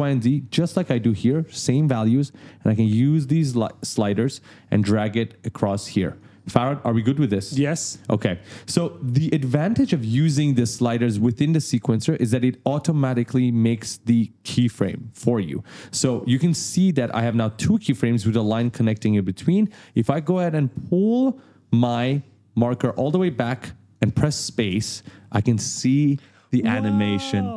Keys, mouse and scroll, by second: 1.9 click, 20.6 click, 24.6 space.